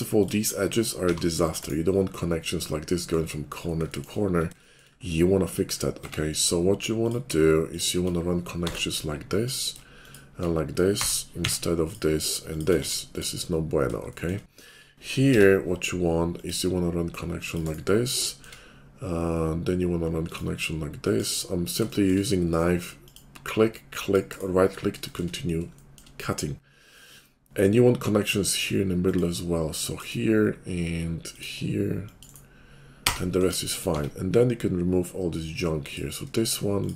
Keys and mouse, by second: 1.0 g, 1.7-3.8 middle drag, 3.8 shift+click, 4.1-6.0 shift+middle drag, 6.0 Tab, 7.0 click, 8.7 j, 11.0 j, 11.4 Tab, 12.4 shift+click, 12.7 x, 15.3 k, 21.9-36.9 shift+middle drag, 33.9 Tab.